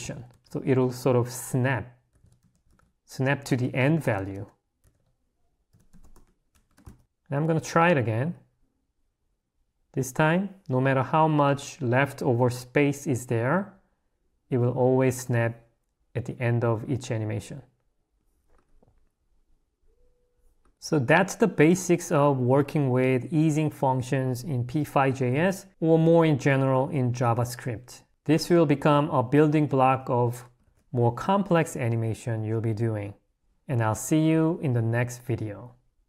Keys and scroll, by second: 6.9 Escape, 20.7 Escape, 30.6 1, 31.4 2.